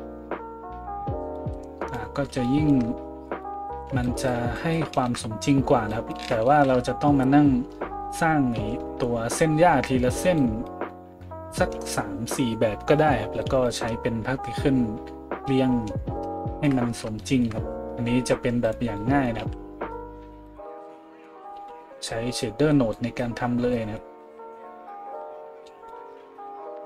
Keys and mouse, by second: 3.8-18.6 middle drag, 6.7 shift+z, 8.5 a, 18.6 right click, 18.7-26.8 middle drag, 19.4 a, 20.5 right click, 21.1 KP_Decimal, 21.5 a.